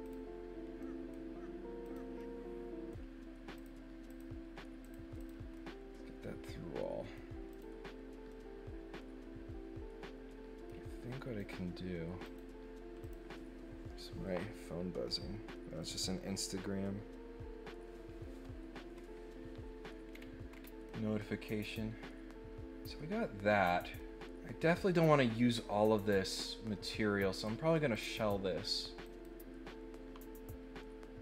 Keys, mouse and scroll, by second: 0.0 click, 0.8 middle click, 1.8 click, 2.2 middle click, 3.5 click, 4.0 click, 4.8 click, 5.2 click, 5.5-7.1 middle drag, 7.5 click, 8.3-10.6 middle drag, 11.3 click, 12.2 click, 13.0 click, 20.1 scroll down 4, 20.4 scroll up 2, 20.8-23.9 middle drag, 27.4 click, 27.9 click, 29.0 click.